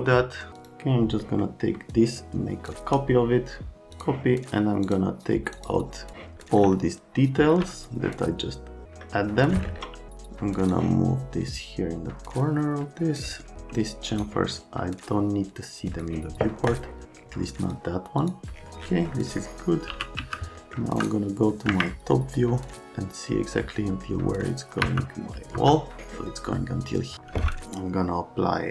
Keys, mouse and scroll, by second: 0.6 click, 1.4 right click, 6.4 right click, 6.7 alt+middle click, 9.5 middle click, 10.7 click, 14.1 right click, 15.8 click, 16.7 click, 17.6 click, 18.2 click, 19.4 scroll down 1, 19.9 r, 20.2 z, 20.6 scroll up 1, 21.7 Escape, 22.1 scroll up 1, 24.8 F3, 25.6 F3.